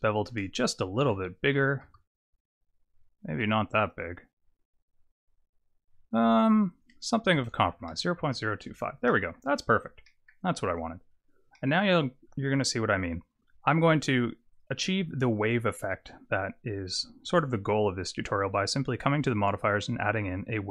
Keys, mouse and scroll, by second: 0.2 click, 3.9 click, 6.7 click, 9.1 middle click, 9.5-10.1 scroll down 6, 10.1 middle click, 10.6 click, 11.5 middle click, 14.5 click, 15.7 click.